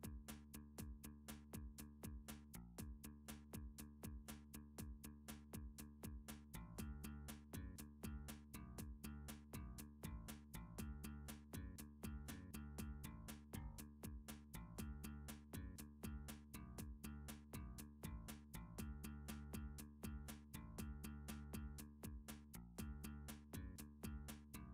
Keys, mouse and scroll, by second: 0.3 middle click, 0.6 middle click, 1.0 middle click, 2.0 middle click, 2.1 Tab, 3.6 middle click, 4.4 shift+click, 5.2 shift+click, 6.0 click, 7.5 middle click, 8.0 click, 8.4 shift+click, 9.9 middle click, 10.5 shift+click, 13.4 f, 14.0 middle click, 14.3 click, 14.7 alt+click, 15.4 click, 15.6 click, 15.7 alt+click, 16.0 shift+click, 16.7 shift+click, 18.0 f, 19.3 middle click, 19.7 ctrl+z, 20.1 scroll up 2, 20.8 middle click, 21.1 shift+click, 21.4 scroll up 1, 21.6 middle click, 22.0 middle click, 22.2 shift+middle click, 22.3 shift+middle click, 22.5 shift+click, 22.9 middle click, 23.5 f, 24.2 shift+middle click, 24.5 click.